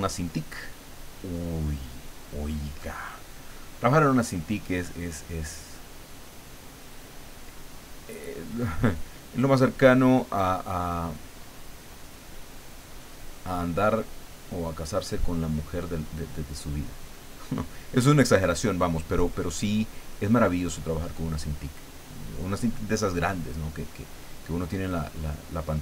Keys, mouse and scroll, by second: 5.3-8.0 drag, 8.7-11.8 drag, 12.4-15.8 drag, 16.3-19.1 drag, 19.6-21.5 drag, 22.1-24.5 drag, 24.9-25.8 drag.